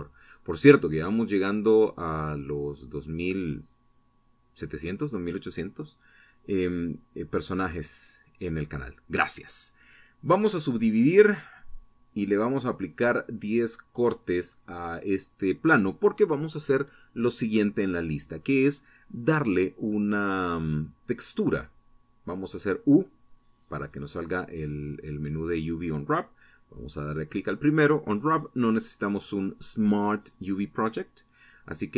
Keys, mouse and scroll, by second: 0.9 w, 1.7 click, 4.7 t, 9.2-11.4 drag, 12.6 Tab, 16.3 Tab, 18.8 u, 21.0 click, 26.6 ctrl+Left, 30.2 ctrl+Right.